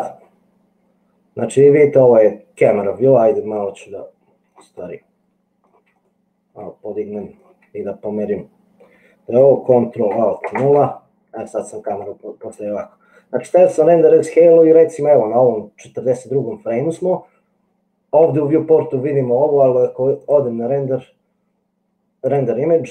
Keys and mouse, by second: 3.2-4.6 shift+middle drag, 5.2 middle click, 6.3-7.5 shift+middle drag, 10.6 ctrl+alt+KP_0, 20.4-22.9 drag.